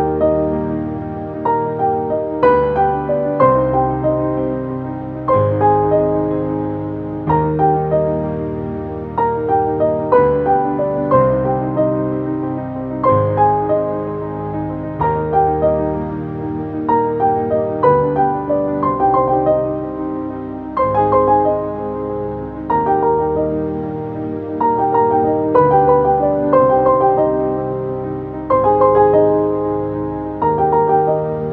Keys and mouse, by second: 0.0 ctrl+space, 1.8 right click, 2.8 click, 4.6 click, 7.6 click, 7.6 typing, 11.3 click, 12.2-13.9 typing, 12.8-21.1 shift+drag, 21.1 ctrl+z, 21.7 click, 25.6 typing, 26.8-29.6 shift+drag, 30.9 click.